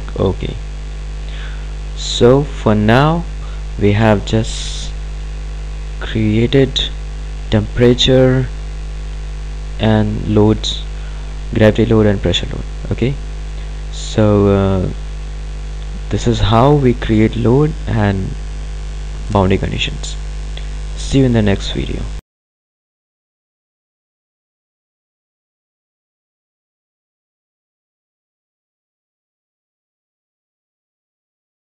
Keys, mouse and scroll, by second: 0.1 click, 2.6 click, 5.1-7.1 ctrl+alt+drag, 15.7 click.